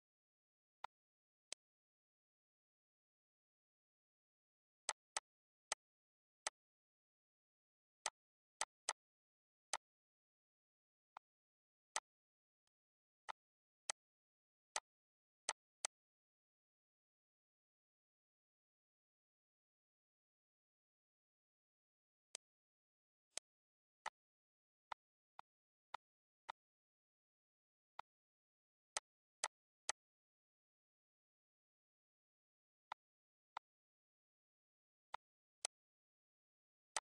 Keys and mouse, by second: 0.6 click, 1.2 click, 4.6 click, 5.4 click, 6.2 click, 7.8 click, 9.5 click, 10.9 click, 11.7 click, 12.5 click, 13.0 shift+click, 13.7 click, 14.5 click, 15.3 click, 21.9 click, 22.7 click, 23.5 click, 24.4 click, 25.4 click, 26.0 shift+click, 26.6 click, 27.4 click, 28.5 click, 32.5 shift+click, 33.1 click, 34.6 click, 36.3 click.